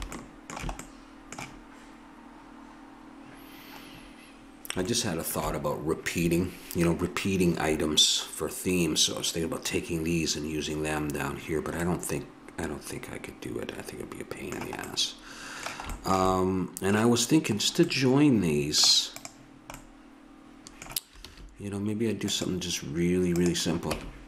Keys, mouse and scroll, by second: 0.9-12.2 middle drag, 13.5-15.0 middle drag, 19.4-21.1 drag, 21.3 shift+a, 23.9 Tab.